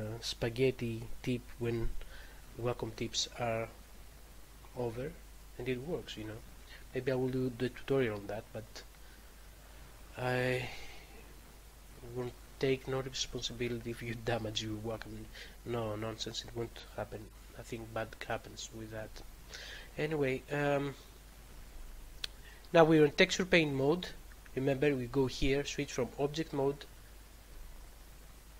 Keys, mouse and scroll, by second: 9.3 click, 25.0 click, 26.2 click, 27.5 click.